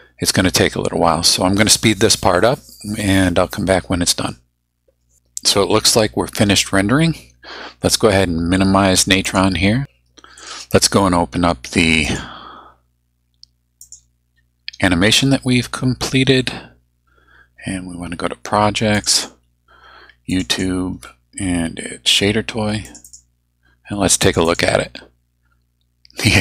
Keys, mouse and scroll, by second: 9.3 click, 10.4 right click, 12.0 click, 13.8 click, 18.9 click, 20.3 click, 22.9 click, 24.3 click, 26.3 click.